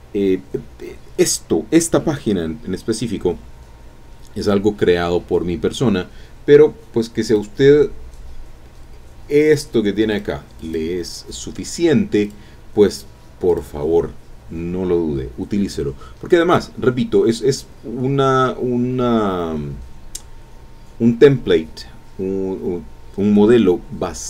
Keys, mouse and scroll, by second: 7.3 click, 9.4 click, 10.1 click, 10.6 click, 11.8-12.1 scroll down 1, 12.2 click, 12.9 click, 13.5 click, 17.9-18.4 scroll up 2, 18.6 scroll down 2, 19.0-19.4 scroll up 2.